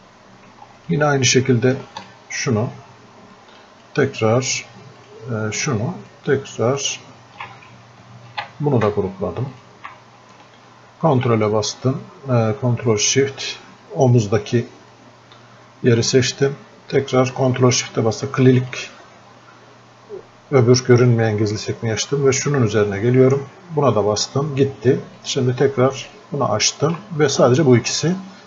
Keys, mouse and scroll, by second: 8.4 ctrl+w, 9.6-28.4 ctrl+shift+drag, 15.2-19.0 ctrl+shift+drag.